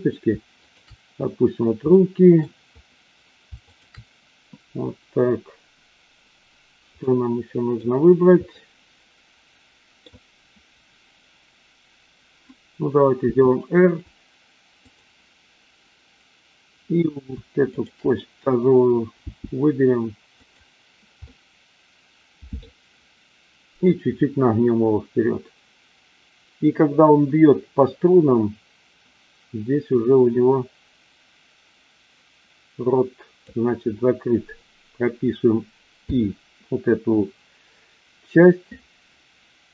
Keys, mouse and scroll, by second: 1.9-2.4 middle drag, 3.7-4.3 shift+drag, 6.9-7.8 middle drag, 8.4-10.1 middle drag, 13.1 r, 14.8 click, 19.2 g, 21.3-22.6 middle drag, 29.8-33.4 drag, 36.0 i.